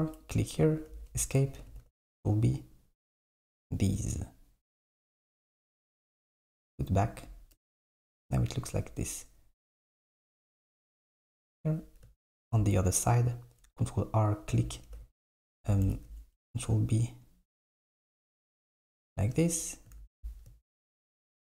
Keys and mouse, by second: 1.7 ctrl+b, 6.6 click, 7.6 KP_7, 10.1 s, 12.3 r, 15.1 ctrl+b, 15.9 ctrl+b, 20.1 alt+z.